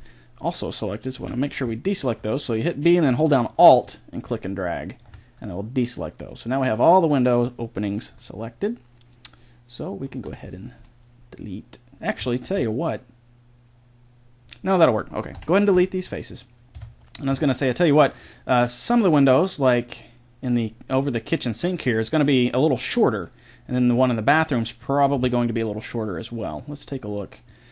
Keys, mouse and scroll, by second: 1.2 b, 5.5 middle click, 7.3 middle click, 10.1-12.3 middle drag, 10.3 Delete, 14.4-16.1 middle drag, 15.3 Delete, 16.7 Tab, 17.3 z, 19.4-23.2 middle drag.